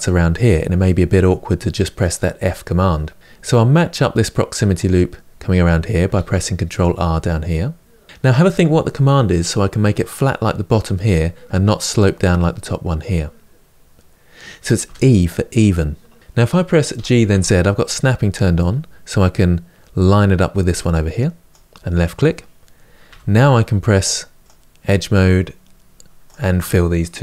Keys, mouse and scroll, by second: 5.9 ctrl+r, 16.8 g, 24.4 click.